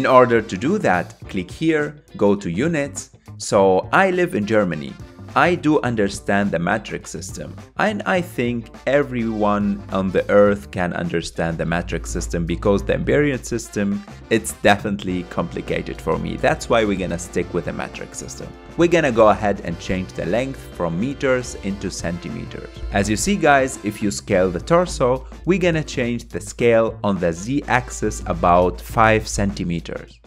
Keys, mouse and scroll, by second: 0.9 click, 3.4-6.4 drag, 6.5-9.7 drag, 13.4-14.6 scroll down 1, 14.6-16.4 scroll down 1, 18.4-21.6 drag, 23.2 s.